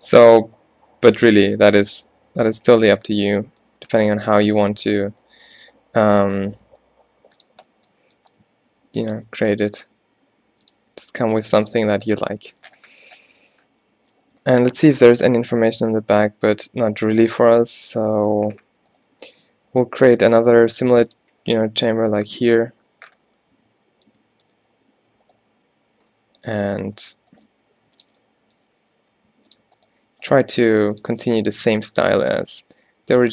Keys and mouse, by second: 5.5 g, 6.3 click, 6.6 e, 8.4 g, 9.4 e, 10.0 e, 10.9 e, 11.7 Tab, 12.0 Tab, 19.2 g, 20.5 e, 24.6 g, 27.6 g, 27.9 click, 29.1 click, 29.1 e, 30.2 f, 30.6 g.